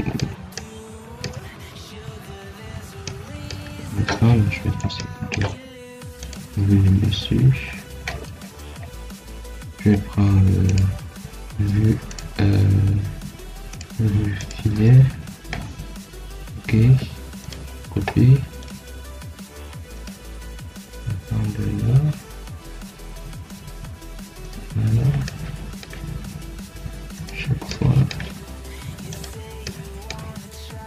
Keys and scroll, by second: 16.7 Escape.